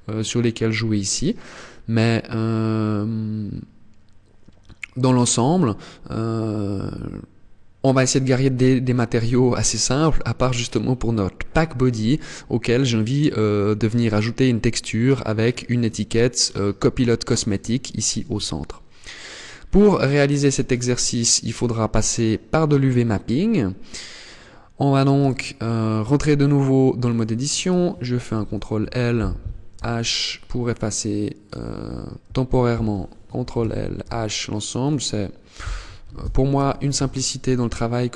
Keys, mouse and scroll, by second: 0.4 scroll down 1, 1.1 scroll down 1, 2.7 scroll up 1, 3.5 scroll up 1, 8.7 click, 9.6 click, 19.1 click, 22.5 middle click, 24.7 Tab, 25.6 scroll up 1, 26.7 right click, 27.9 ctrl+l, 29.2 h, 30.9 right click, 32.9 ctrl+l, 33.5 h, 34.3 right click, 35.5 ctrl+l, 36.1 h, 36.5 middle click, 37.2 scroll down 4, 37.6 middle click.